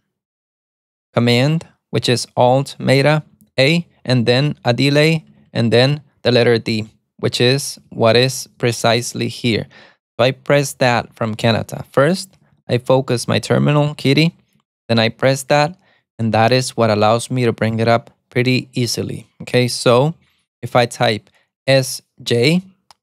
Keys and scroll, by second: 0.8-5.5 typing, 6.8 space, 6.9 BackSpace, 7.9-15.5 typing, 22.5 alt+super+a.